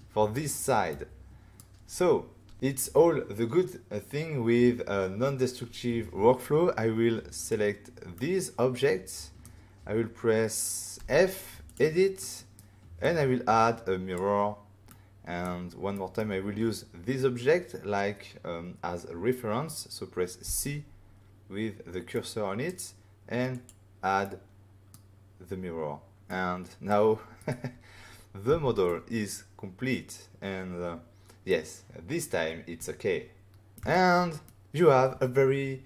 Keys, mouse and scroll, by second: 0.9 middle click, 7.3 click, 8.1 middle click, 11.0 f, 11.6 click, 12.2 middle click, 12.5 middle click, 13.0 click, 14.9 middle click, 15.9 middle click, 20.5 c, 22.1 middle click, 23.5 click, 24.2 middle click, 26.3 middle click, 27.3 right click, 28.5 <, 28.9 middle click.